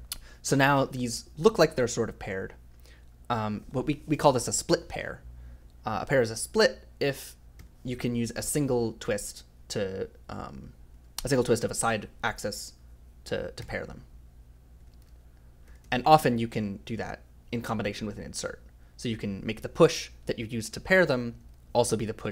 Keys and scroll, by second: 0.6 j, 7.5 i, 10.9 ctrl+z, 11.8 ctrl+o, 13.6-16.4 typing, 17.8 i, 21.4 j.